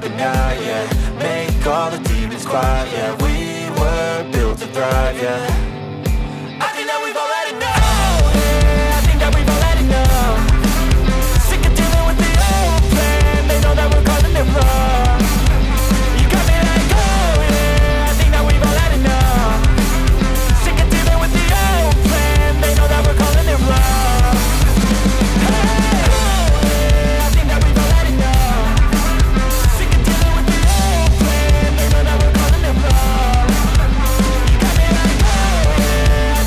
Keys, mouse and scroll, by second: 5.1 space, 9.1 space, 14.2 ctrl+z, 30.5 space, 33.5 ctrl+z.